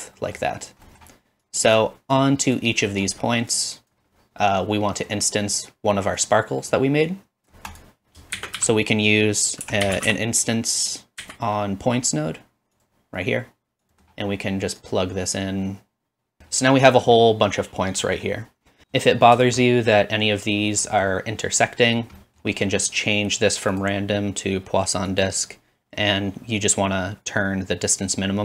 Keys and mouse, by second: 2.4-3.6 drag, 8.3 shift+a, 13.9-14.9 drag, 13.9 typing, 15.0 click, 15.0-16.6 middle drag, 15.0 right click, 19.1 shift+middle click.